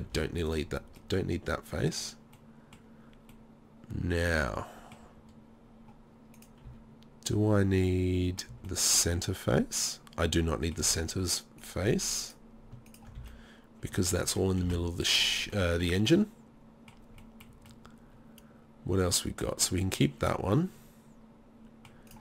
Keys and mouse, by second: 0.1 Delete, 0.1 click, 1.0 middle click, 1.7 middle click, 6.7 z, 8.4 middle click, 8.5 z, 9.2 middle click, 9.5-10.6 middle drag, 10.8 z, 13.2 z, 14.7 Delete, 18.4 middle click, 18.6 middle click.